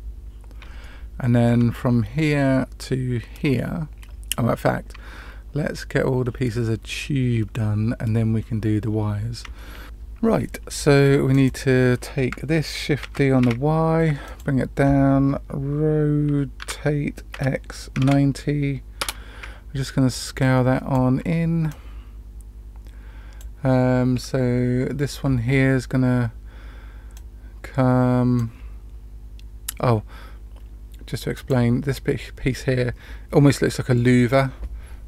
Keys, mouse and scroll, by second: 0.7-1.5 shift+middle drag, 8.3-9.4 scroll down 1, 11.2 click, 12.9 shift+d, 16.5 r, 20.0-20.9 drag, 21.6-23.3 drag, 27.1-28.4 drag, 31.3 click.